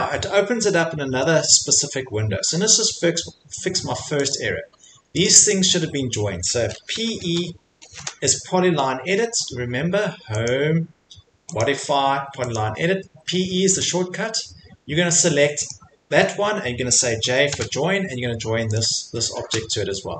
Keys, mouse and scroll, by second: 0.6 middle click, 0.7 middle click, 0.8 middle click, 1.5 middle click, 4.3 click, 4.7 Escape, 5.0 Escape, 5.2 click, 5.5 click, 5.9 Escape, 6.9 typing, 9.2 Escape, 10.5 click, 11.6 click, 12.5 click, 13.8 click, 15.7 click, 17.2 j, 18.7 click, 19.4 |.